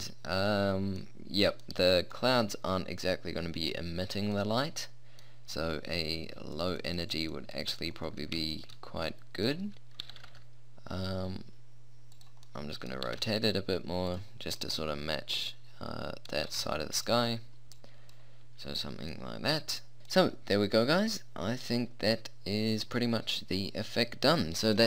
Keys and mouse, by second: 6.6-9.6 drag, 9.6 middle click, 10.0 r, 13.1 r, 15.0 middle click, 16.5 r, 18.2-19.2 drag, 20.0-21.2 middle drag, 24.6-24.8 middle drag.